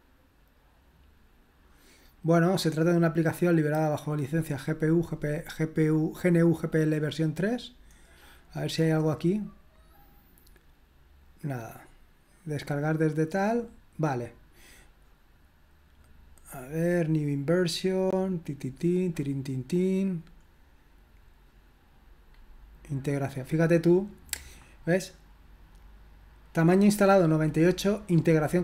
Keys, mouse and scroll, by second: 7.8-9.3 scroll down 1.